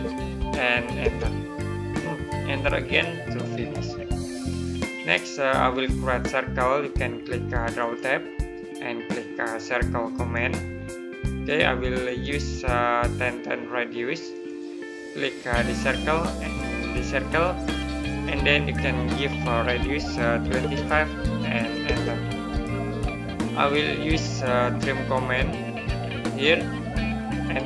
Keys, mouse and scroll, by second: 2.6 right click, 4.5-5.0 scroll down 1, 5.0 middle click, 7.6 click, 20.3 KP_2, 24.5 click, 27.3 right click.